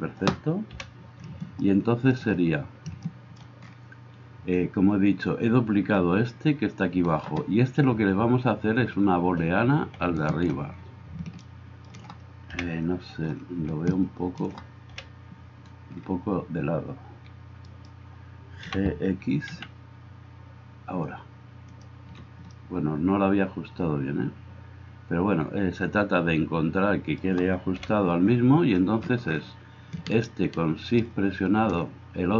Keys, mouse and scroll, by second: 0.8 KP_1, 12.6 KP_1, 14.9 KP_1, 18.7 g, 27.8 KP_1.